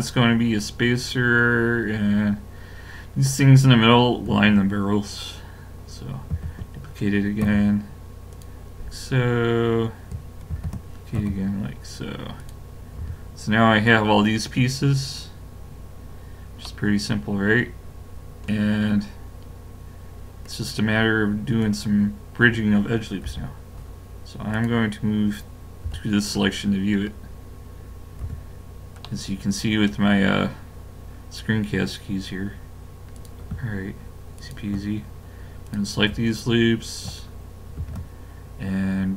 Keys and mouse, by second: 1.6-4.9 middle drag, 6.3 shift+d, 9.1 middle click, 10.5 shift+d, 11.5-13.4 middle drag, 13.0 a, 18.8 middle click, 21.6 click, 23.3 KP_Decimal, 24.5-25.8 drag, 25.8 KP_Decimal, 28.2 a, 31.2 middle click, 33.2-37.6 drag, 37.8 ctrl+e.